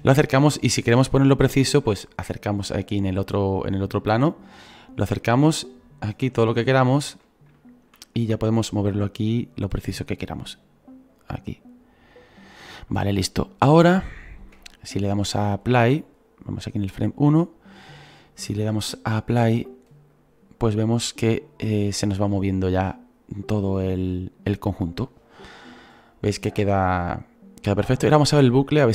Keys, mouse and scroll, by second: 0.8-1.5 scroll up 2, 1.5-2.2 scroll up 1, 2.2-3.4 scroll up 1, 3.4-6.0 middle drag, 6.0-6.7 scroll up 4, 6.7-7.2 scroll down 1, 7.2-7.7 scroll down 1, 7.7-9.1 shift+middle drag, 9.1-12.5 drag, 13.3-14.1 scroll down 7, 14.1 shift+middle click, 14.6-15.1 scroll down 5, 15.1-16.5 shift+middle drag, 16.5-23.1 drag, 17.8-19.4 scroll up 2, 19.4-20.2 scroll up 1, 23.7 right click.